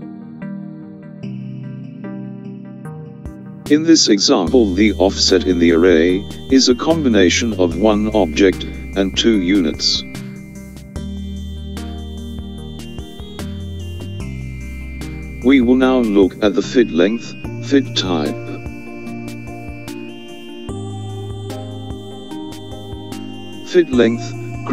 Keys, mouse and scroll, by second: 15.2 click, 19.6 click.